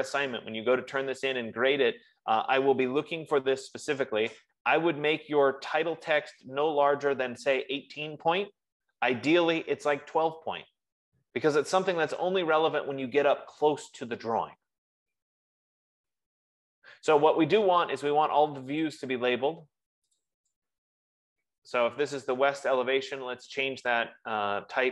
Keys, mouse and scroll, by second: 12.6 F15, 19.2 click, 20.8 click, 20.9 click, 22.0 ctrl+a.